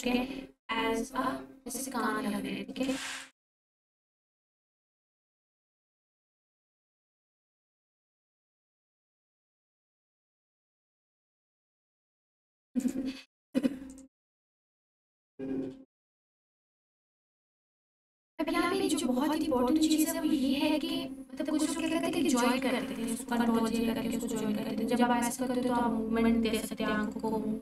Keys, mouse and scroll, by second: 3.2 click, 4.7 Tab, 7.5 scroll down 1, 10.4-11.2 scroll down 1, 11.2 alt+h, 12.7-14.1 drag, 16.0 h, 17.0-17.5 scroll up 1, 18.3 alt+q, 21.7 click, 23.1 r.